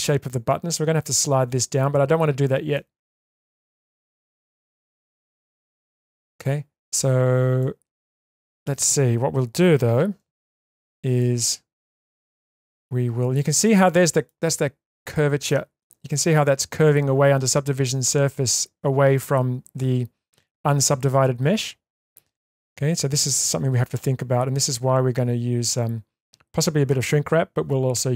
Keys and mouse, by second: 2.8-3.2 middle drag, 3.4-3.7 shift+middle drag, 3.9-4.4 middle drag, 4.6-5.0 shift+middle drag, 5.2-6.2 middle drag, 6.3-6.8 shift+middle drag, 7.6-8.6 middle drag, 10.2 1, 10.8 click, 11.2-13.3 middle drag, 13.7 alt+middle click, 15.1-15.8 shift+middle drag.